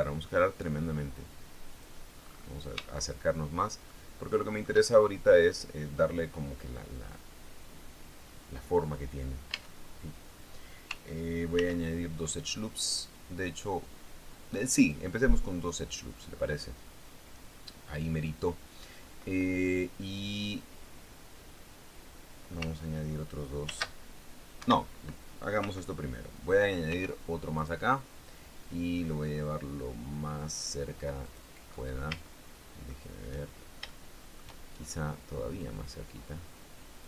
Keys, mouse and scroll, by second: 2.1 click, 2.6-3.2 scroll up 1, 3.3 shift+click, 4.2 shift+click, 5.2-5.9 shift+scroll up 2, 9.9 Tab, 11.9 ctrl+r, 12.6 scroll up 2, 15.2 click, 16.2 click, 24.0 ctrl+r, 25.0 Escape, 27.2 ctrl+r, 28.0 click, 31.6 click, 32.0-32.6 scroll up 2, 32.6 shift+click, 34.2 shift+click, 36.0-37.0 drag.